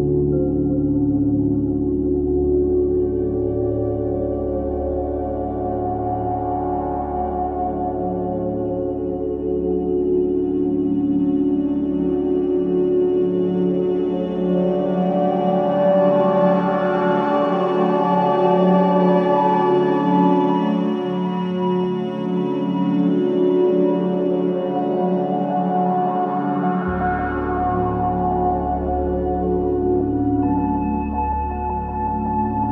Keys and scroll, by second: 0.5 ctrl+c, 1.1 ctrl+v, 13.6 c, 22.6 space, 23.4 v, 23.8 space, 32.2 ctrl+space.